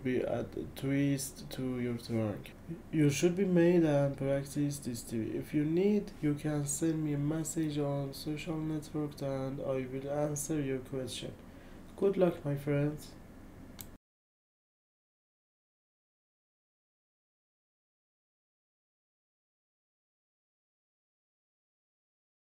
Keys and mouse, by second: 0.0-2.1 typing, 0.1 Return, 0.9 Return, 1.4 Return, 2.6 Return, 7.0 ctrl+z, 14.3-15.9 typing, 17.5 Right, 17.7 BackSpace, 18.2 Return, 21.7 ctrl+c.